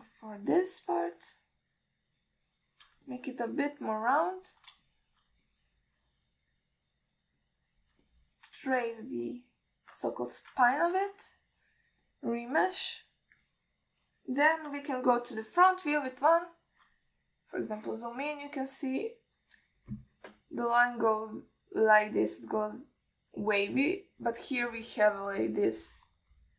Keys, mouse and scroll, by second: 0.3 shift+click, 1.3 alt+shift+middle click, 2.0-4.1 shift+drag, 4.3 middle click, 5.1 click, 6.1 alt+shift+middle click, 6.7 alt+middle click, 7.8 click, 8.6 click, 9.3 alt+shift+middle click, 9.9-11.0 drag, 11.2 alt+middle click, 11.9 ctrl+alt+middle click, 12.5 alt+shift+middle click, 13.3 click, 14.7 click, 16.7 KP_1, 17.6 ctrl+alt+middle click, 25.1 scroll down 1.